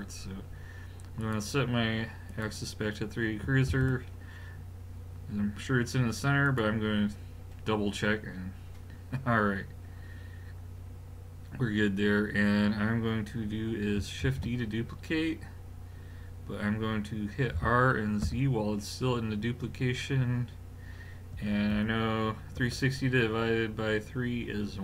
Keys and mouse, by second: 1.2 click, 3.7 shift+s, 14.2 shift+d.